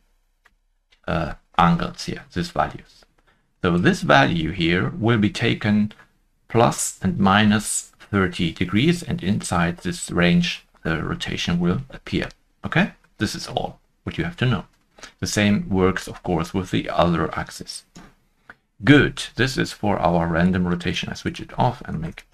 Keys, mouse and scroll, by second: 11.4 ctrl+z, 11.4 Escape, 12.2 middle click, 13.1 middle click, 14.0 ctrl+middle click, 14.1 middle click, 14.5 middle click, 14.5 shift+middle click, 21.8 Escape, 21.8 ctrl+middle click, 22.0 shift+middle click, 22.0 0.